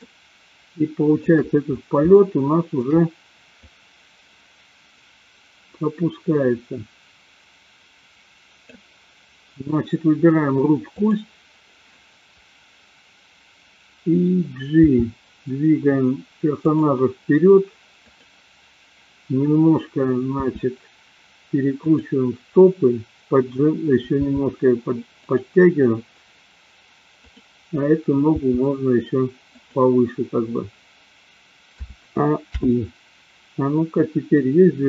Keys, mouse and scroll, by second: 0.0-1.4 shift+middle drag, 2.1 shift+middle click, 3.9-9.0 drag, 10.9 click, 14.7 g, 16.7 click, 18.0 click, 20.5 r, 22.0 click, 24.1 g, 25.2 click, 28.2 g, 29.6 click, 31.9 a, 32.6 i, 34.2-34.8 drag.